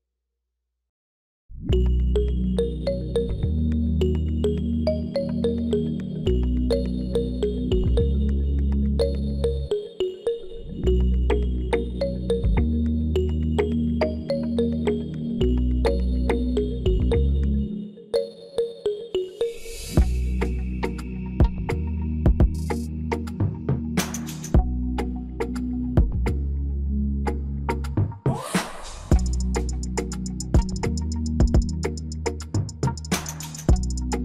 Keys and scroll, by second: 30.2 Return, 32.8 -.